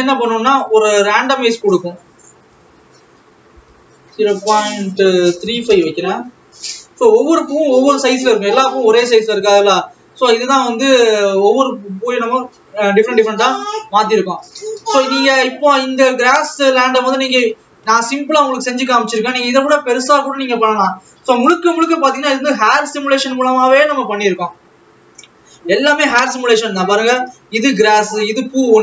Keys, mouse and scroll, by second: 1.8-10.3 drag, 10.3 ctrl+s, 10.7 alt+a, 12.6 click, 16.7 scroll down 3, 19.4 ctrl+s, 20.3 Left, 23.1 scroll up 2, 24.9 scroll up 11, 25.4 scroll up 8, 26.6 scroll up 16.